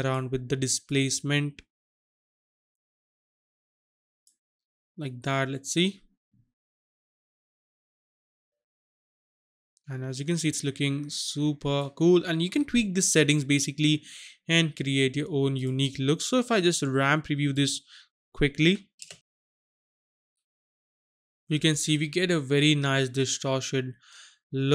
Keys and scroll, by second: 18.7 n.